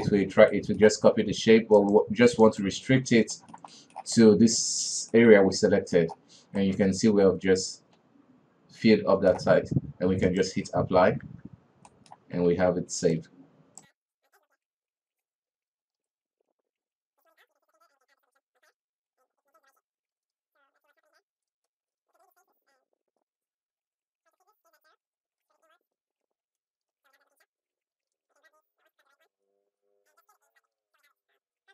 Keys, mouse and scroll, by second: 1.9-3.5 drag, 3.5-6.4 shift+middle drag, 6.4-6.8 scroll up 1, 6.8-9.8 middle drag, 10.4 click, 11.4 Tab, 12.1-12.7 middle drag, 12.7 alt+a, 13.3 right click, 13.8 alt+a, 13.9 ctrl+r, 14.7 middle click, 14.9 Tab, 15.0 middle click, 15.2-15.7 scroll up 3, 15.3 middle click, 15.5 Tab, 15.7 alt+a, 15.9 Tab, 16.1 right click, 16.8 scroll down 5, 16.9 middle click, 17.1 w, 17.3 alt+a, 17.3 middle click, 17.4 scroll up 3, 17.5-17.9 middle drag, 17.9 right click, 18.0 q, 18.5 middle click, 18.7 alt+a, 18.8 scroll down 2, 18.9 KP_3, 19.1-19.7 middle drag, 19.8 middle click, 20.0 Tab, 20.0 scroll up 1, 20.2 middle click, 20.3 alt+a, 20.6 scroll up 1, 20.7-22.0 typing, 21.0 shift+middle click, 22.4 alt+a, 23.1 click, 23.2 shift+z, 23.3 middle click, 23.4 scroll up 2, 23.8 click, 24.0 middle drag, 24.2 alt+right click, 24.4 alt+right click, 24.6-26.7 typing, 25.1 shift+middle click, 26.9 Tab, 27.0 scroll down 7, 27.4-27.7 middle drag, 27.7 scroll up 2, 27.8 middle click, 27.9 Tab, 28.1 alt+a, 28.2 alt+right click, 28.5 s, 28.9-29.4 alt+right drag, 29.5 s, 30.8 Tab, 30.8 middle click, 31.0 alt+a, 31.1-31.7 middle drag.